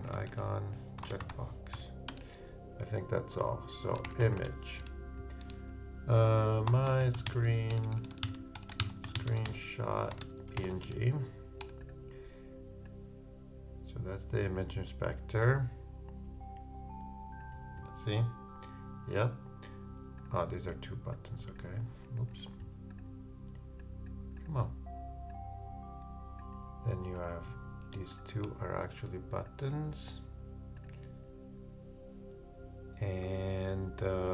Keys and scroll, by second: 3.8-4.7 typing, 8.2 shift+-, 8.5 shift+BackSpace, 8.8 shift+-, 22.3 super+z.